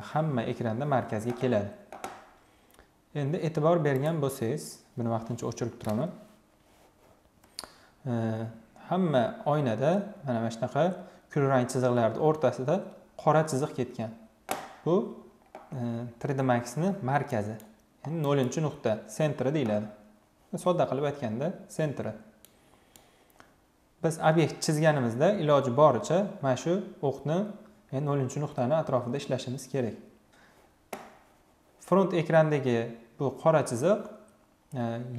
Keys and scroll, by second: 5.4 Delete.